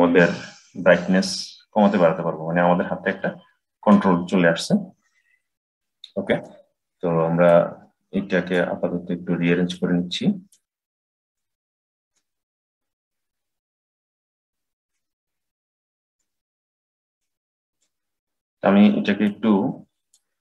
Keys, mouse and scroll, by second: 4.9-5.7 scroll down 10, 5.7-7.3 middle drag, 7.3 click, 9.6 click, 11.2 click, 14.7 click, 17.0-20.4 drag.